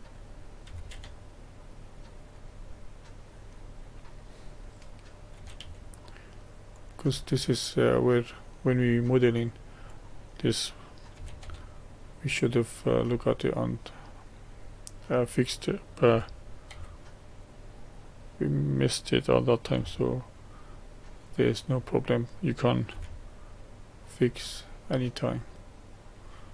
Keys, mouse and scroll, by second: 0.7 g, 2.8-4.4 middle drag, 4.4 click, 5.4 g, 7.3-10.1 middle drag, 10.1 click, 11.2 g, 13.2-16.1 middle drag, 16.1 g, 19.8 g, 21.9 click, 23.0 g, 24.9-26.5 middle drag.